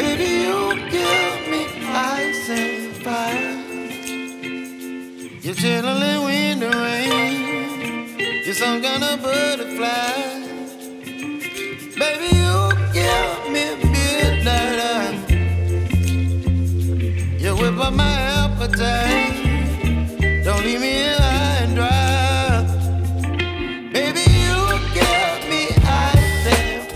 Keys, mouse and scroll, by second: 1.5 Right, 3.5 click, 5.2 Right, 6.6-8.9 drag, 8.9 right click, 11.3 click, 14.6-18.6 shift+drag, 20.9 click, 22.6 ctrl+s, 26.3 click.